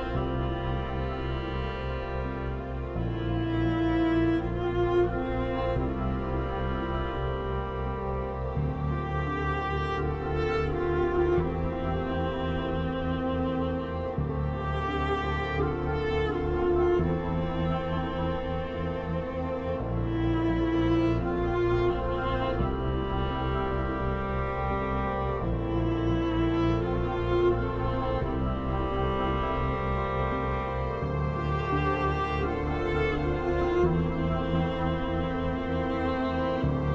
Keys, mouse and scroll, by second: 5.4-8.8 drag, 8.8 F2, 9.0-11.5 drag, 11.5 F3, 12.0 Escape, 12.3 F4, 13.3-16.3 drag, 16.3 F2, 16.6 click, 17.3 F3, 17.8 click, 18.5 F2, 18.9-22.6 drag, 24.2-33.4 drag, 33.4 ctrl+u, 33.7 Escape, 33.8-36.9 alt+drag.